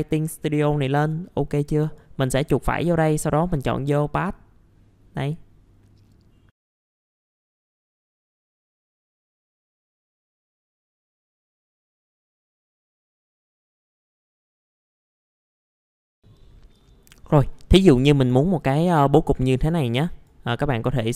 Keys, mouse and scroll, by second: 1.2 middle click, 1.8 right click, 3.4 click, 6.5 scroll down 1, 6.7 middle click, 6.9 click, 7.2 t, 7.3 click, 7.5 F3, 7.6 click, 8.4 shift+click, 8.7 t, 8.8 F4, 8.9 click, 9.0 F3, 9.1 click, 9.6 click, 9.8 middle click, 9.9 scroll down 1, 9.9 click, 10.7-12.3 typing, 10.8 click, 10.9 click, 11.5 click, 11.7 middle click, 11.7 scroll down 1, 11.8 click, 12.1 click, 12.3 click, 12.6 click, 13.4 click, 14.1 click, 14.8-15.4 typing, 14.8 click, 15.5 click, 16.0 shift+click, 16.1 middle click, 16.2-21.1 drag.